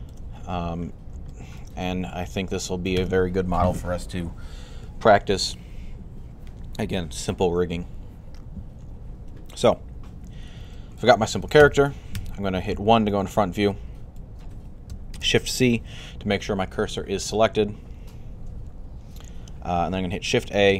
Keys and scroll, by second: 11.7-12.5 typing, 15.0 typing, 20.4 a.